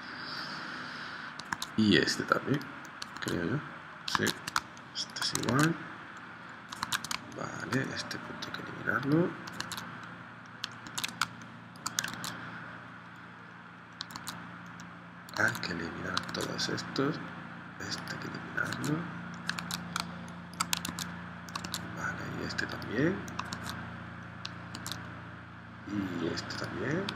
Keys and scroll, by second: 1.6 super+Tab, 3.2 super+Tab, 4.3 super+Tab, 4.6 space, 5.5 super+Tab, 6.9 super+End, 7.1 space, 9.6 super+Tab, 10.8 super+Tab, 11.2 space, 12.2 super+Tab, 14.1 super+Tab, 15.3 super+Tab, 16.3 super+Tab, 18.7 super+Tab, 19.7 super+Tab, 20.1 space, 20.9 super+Tab, 23.5 super+Tab, 24.7 super+Tab.